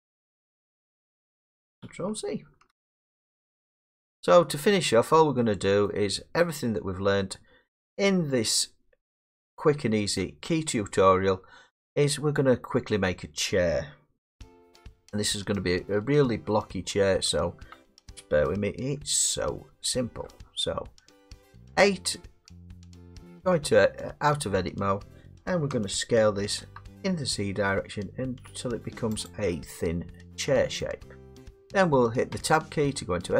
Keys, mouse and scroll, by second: 1.1 middle click, 2.7 ctrl+z, 3.3 middle click, 3.3 middle click, 3.4 middle click, 4.0 middle click, 4.3 middle click, 4.4 middle click, 4.5 middle click, 5.9 middle click, 6.5 middle click, 7.0-8.4 scroll, 8.4 scroll, 8.5 middle click, 9.1 middle click, 9.7-10.1 scroll, 10.1 middle click, 10.6 middle click, 10.6 scroll, 12.1 scroll, 14.5-14.8 scroll, 15.1 middle click, 15.5 middle click, 15.9 scroll, 17.3 middle click, 17.4 middle click, 20.6-21.0 middle click, 20.6 middle click, 20.9 scroll, 22.3 middle click, 22.8 Tab, 25.7 s, 26.7 z, 29.7 click, 30.0 click, 30.8 middle click, 32.3 Tab.